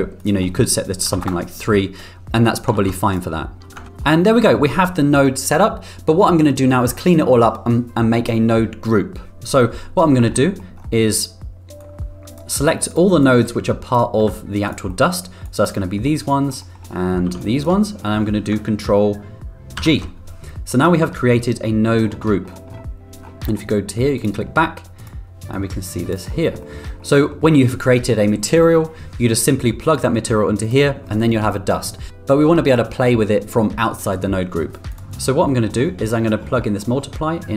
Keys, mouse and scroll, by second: 0.2-1.8 drag, 3.0 ctrl+b, 4.3 middle click, 10.3 middle click, 11.8-12.3 drag, 13.2-14.0 drag, 14.2 g, 14.9 middle click, 15.5 click, 15.8 middle click, 16.5 middle click, 17.3 b, 19.8 ctrl+g, 20.7 middle click, 24.2 click, 24.9 drag, 25.5-26.1 drag, 26.6 middle click, 27.1 middle click, 30.0-30.7 drag, 34.9 click, 35.6 middle click, 36.1 middle click, 36.9 middle click.